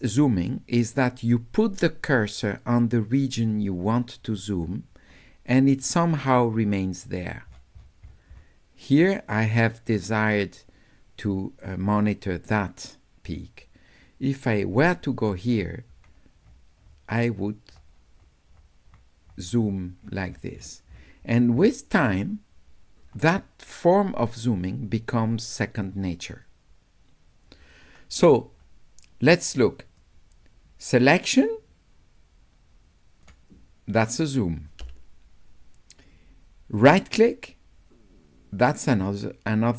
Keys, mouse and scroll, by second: 1.9-3.0 middle drag, 3.2 middle click, 3.3 middle click, 8.3 middle click, 16.0 middle click, 16.9 middle click, 17.4 middle click, 18.7 middle click, 20.0 middle click, 20.6 middle click, 20.9 middle click, 21.3 middle click, 23.1 middle click, 26.0 middle click, 26.0 scroll down 2, 30.0-33.3 drag, 36.8-39.7 right drag.